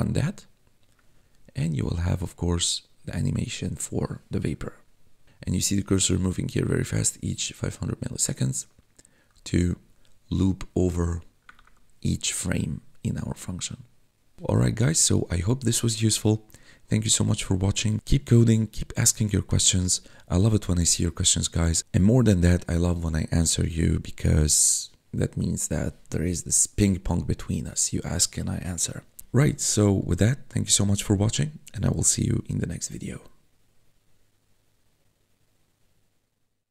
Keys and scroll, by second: 11.6 4.